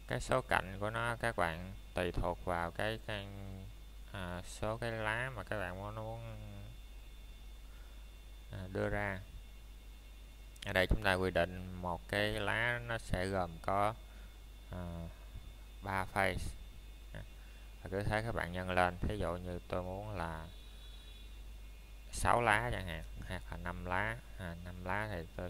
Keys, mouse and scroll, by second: 2.2 click, 18.1 KP_Enter.